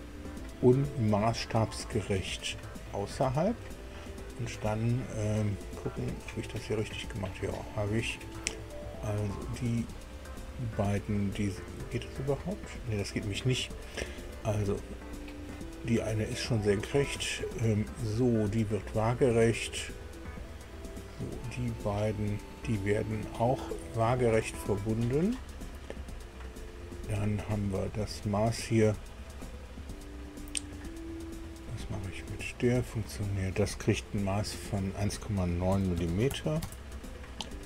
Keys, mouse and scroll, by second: 0.4 click, 2.1 click, 3.5 click, 4.5 right click, 4.9-5.3 scroll up 2, 5.9 right click, 6.5-7.7 drag, 9.1 click, 10.5 click, 12.2 click, 13.9 click, 14.3 click, 15.3 click, 17.1 click, 18.9 click, 20.4 click, 22.2 click, 23.3 click, 25.3 click, 28.5 click, 32.3 click, 35.7 KP_1, 36.0 KP_Decimal, 36.3 KP_9, 36.6 KP_Enter.